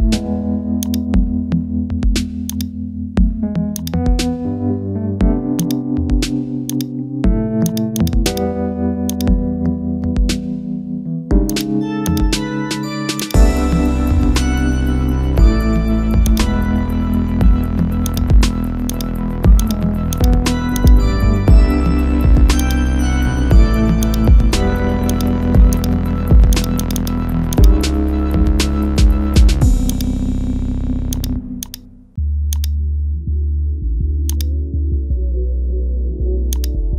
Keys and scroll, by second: 14.2 ctrl+z.